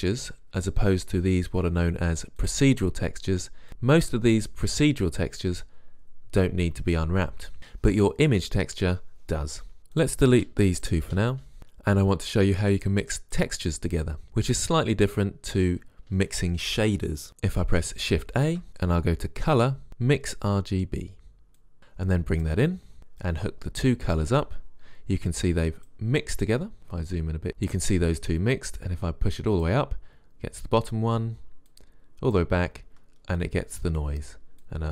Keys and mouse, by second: 2.6-3.7 drag, 10.1-10.5 drag, 10.5 Delete, 10.9 click, 11.2 Delete, 13.0-15.8 drag, 18.6 shift+a, 26.8 middle click, 27.6-29.0 middle drag, 29.0 click, 29.9 drag, 30.3 click, 31.8 middle click, 31.9 click, 33.8-34.8 middle drag.